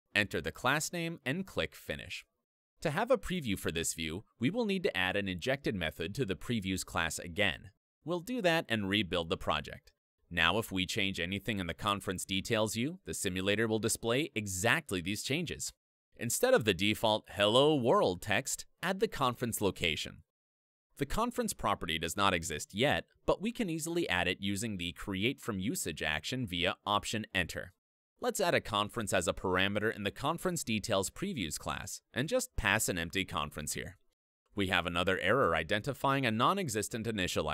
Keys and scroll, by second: 3.0 alt+Down, 5.4 ctrl+Down, 6.5 alt+Up, 8.7 Escape, 10.5 super+F9, 11.4 ctrl+Up, 14.5 super+d, 14.7 super+4, 16.7 super+BackSpace, 18.1 alt+Up, 22.4 F2, 24.5 alt+Return, 25.7 alt+Up, 28.9 Return, 29.9 F2, 32.4 Tab, 36.9 Escape, 37.1 alt+Return.